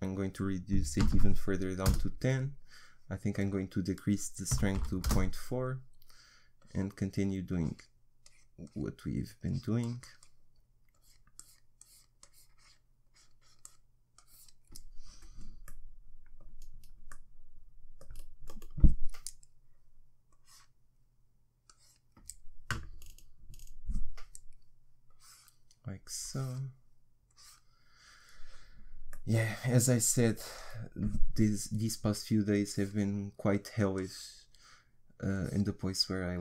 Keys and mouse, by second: 15.7-19.1 middle drag, 20.3-23.4 drag, 23.4 middle click, 25.1-29.2 drag, 29.2-32.5 middle drag, 32.5-36.4 drag.